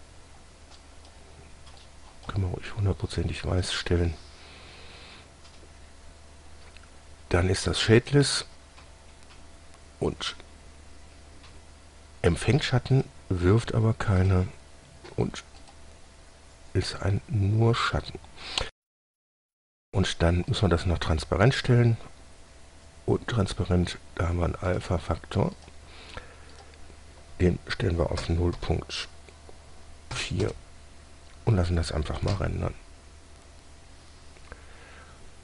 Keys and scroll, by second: 28.5-28.9 typing, 30.7 typing, 32.6 F12.